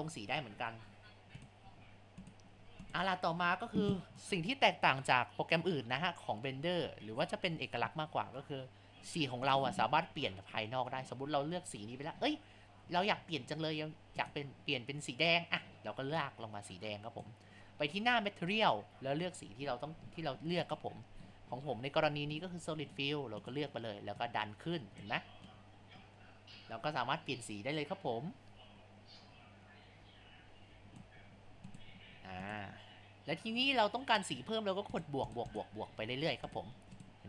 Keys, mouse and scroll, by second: 13.3 scroll.